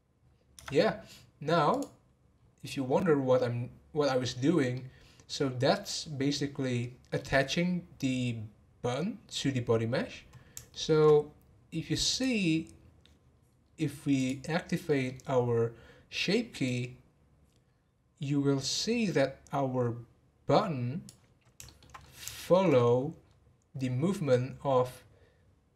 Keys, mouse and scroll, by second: 1.7 click, 4.7-7.7 middle drag, 10.7-12.1 shift+middle drag, 12.1 click, 12.8 scroll down 2, 14.2 click, 14.8-16.6 middle drag, 16.6-19.6 drag, 21.6 shift+middle click, 21.8 shift+scroll down 1, 21.9 scroll up 5, 22.3-22.7 shift+middle drag, 22.9 scroll up 4.